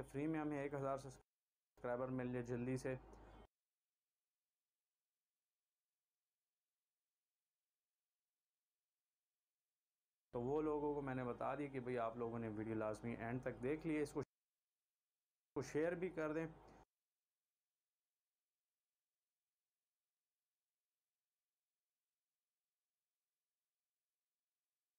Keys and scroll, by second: 1.5 space, 3.8 space, 5.1 c, 8.6 v, 10.3 shift+Delete, 10.7 space, 15.4 space, 15.9 space, 18.2 c, 23.5 v.